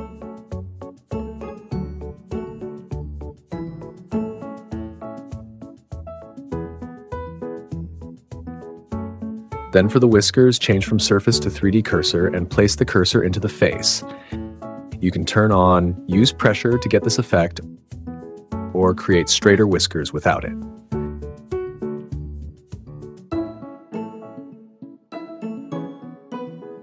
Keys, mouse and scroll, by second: 0.0 click, 0.4-2.4 drag, 2.4 Return, 2.9 super+z, 4.0 Return, 4.2 click, 5.1 Return, 5.5 Tab, 5.9 l, 6.2 g, 6.9 click, 7.1 Tab, 8.0 Tab, 8.7 l, 8.9 Tab, 10.0-11.6 drag, 13.9 click, 14.7 super+z, 14.9-16.1 drag, 16.1 super+z, 16.6 click, 17.4 click, 20.1 super+z, 20.1-21.2 drag, 22.0 super+z, 22.6 super+z, 24.0 Tab, 24.5 click, 24.9 r, 25.8 g, 26.0 click, 26.1 r, 26.4 click.